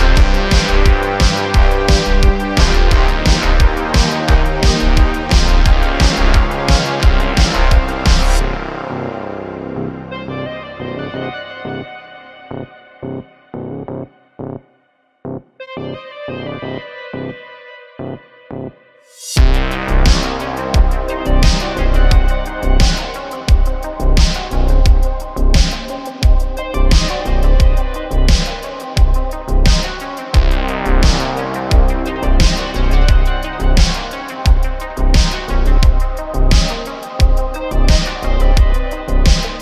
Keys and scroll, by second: 0.5 Tab, 1.6 super+r, 4.3 3, 4.9 i, 5.7 e, 8.5 r, 9.0 x, 15.1 i, 16.3 e, 17.9 i, 19.2 3, 20.2 e, 21.2 Tab, 24.4 shift+a, 25.5 s, 26.7 ., 27.6 s, 28.6 q, 31.1 s, 33.7 shift+d, 34.1 x, 35.2 ., 36.4 shift+d, 36.6 x, 39.2 shift+d.